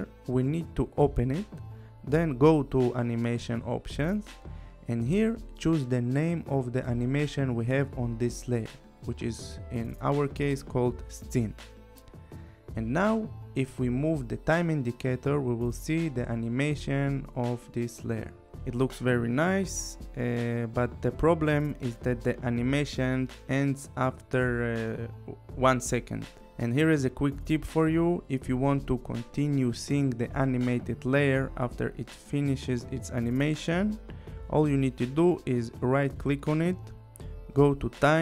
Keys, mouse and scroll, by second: 0.1 click, 2.0 click, 3.3 click, 11.5 click, 13.6 click, 15.2 u, 16.7 click, 21.0 space, 24.6 space, 25.2 click, 35.6 right click.